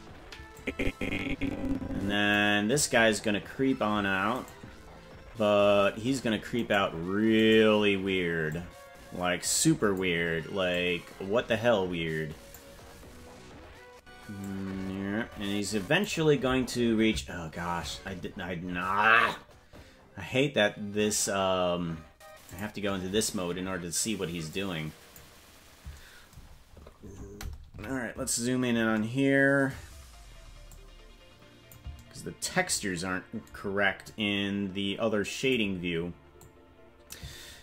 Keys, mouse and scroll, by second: 0.5-2.3 drag, 4.4 right click, 6.6-8.5 right drag, 8.5-9.9 drag, 10.7-12.6 drag, 14.4-16.1 drag, 22.7 click, 26.4-27.4 scroll down 7, 27.5 scroll down 3, 27.7 KP_Decimal, 28.3-28.9 scroll down 5, 30.7-31.7 drag, 34.0-35.5 drag, 36.3 click.